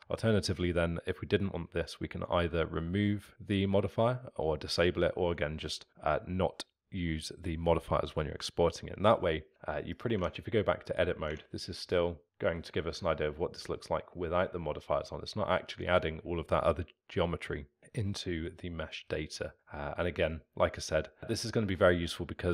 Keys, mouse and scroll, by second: 0.0 Escape, 10.0 click, 12.2 Tab, 12.7-13.7 middle drag, 13.7-17.8 scroll up 3, 17.8 scroll down 1, 18.0-22.5 alt+middle drag.